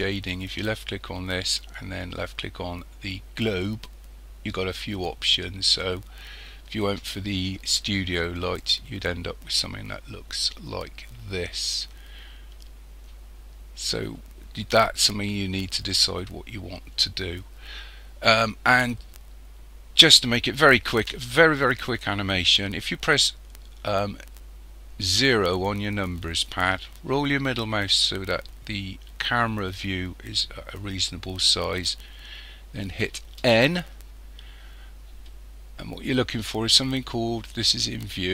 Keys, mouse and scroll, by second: 0.5 click, 25.2 KP_0, 27.2-27.7 scroll up 3, 33.5 n.